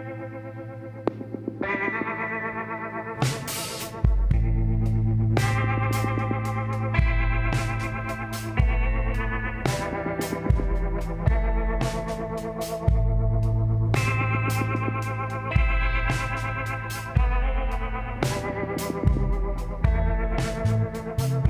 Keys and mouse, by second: 0.3 l, 1.5 KP_1, 2.2 middle click, 4.0 shift+d, 6.6 click, 11.9 middle click, 12.9-16.7 middle drag, 17.4-19.1 drag, 17.9 z, 19.2 b.